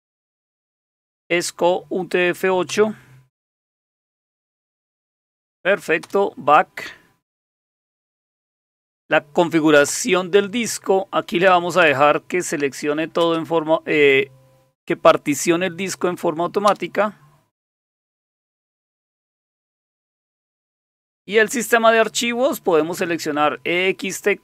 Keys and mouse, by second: 0.4 Down, 0.7 Up, 2.7 Return, 4.7 Down, 4.9 Down, 5.1 Down, 6.0 Return, 9.9 Return, 11.8 Return, 13.2 space, 16.7 Return, 23.3 Down.